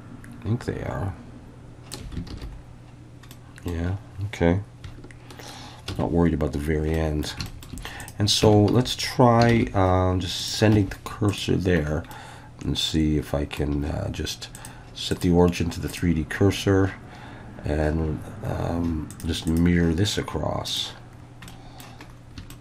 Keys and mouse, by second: 2.3 alt+a, 3.3 middle click, 5.9 ctrl+s, 6.9-7.3 middle drag, 7.5 shift+middle click, 8.4 Tab, 8.7 a, 9.5 shift+s, 10.8 Tab, 11.4-11.8 drag, 12.1-13.6 middle drag, 14.6-16.0 drag, 19.2 drag, 19.5-20.8 drag, 21.5 middle click, 22.5 shift+middle drag.